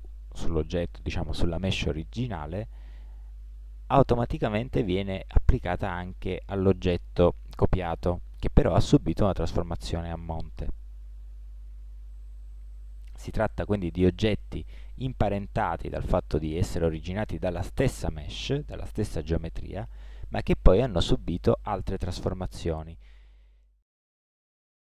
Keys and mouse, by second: 11.3 Tab, 12.1 middle click, 12.7-15.8 middle drag, 18.5 Tab, 20.3 Tab, 24.1 middle click.